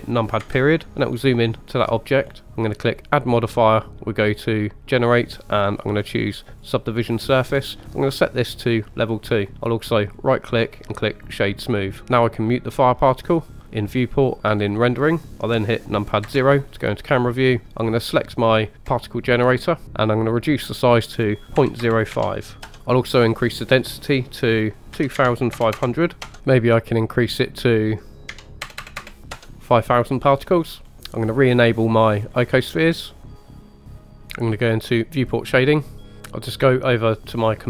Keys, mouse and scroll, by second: 0.4 KP_Decimal, 1.0-1.4 middle drag, 1.7 scroll down 1, 2.3 scroll down 1, 3.0-6.7 drag, 8.0 click, 10.2 right click, 13.6 click, 14.4 click, 16.2 KP_0, 18.9 click, 20.8-22.7 drag, 23.6-26.4 drag, 25.8 KP_0, 27.5-29.4 drag, 28.8 KP_0, 29.0 KP_0, 30.9-33.4 scroll down 1, 33.4-34.1 drag, 35.2 click, 36.0-37.4 scroll down 1.